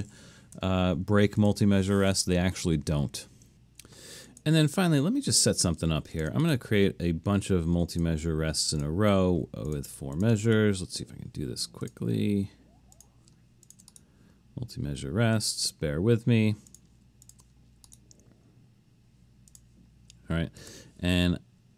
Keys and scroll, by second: 0.6 u, 4.6 shift+?.